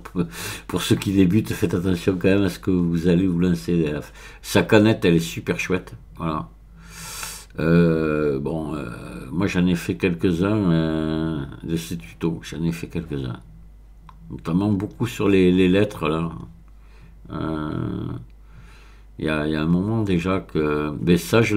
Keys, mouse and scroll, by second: 5.8-6.9 scroll down 4, 8.2-9.7 scroll down 1, 11.0-14.8 scroll down 4, 15.0-15.9 scroll up 3, 15.9-17.2 scroll down 2, 17.7-18.6 scroll down 3, 19.2-20.4 scroll down 3.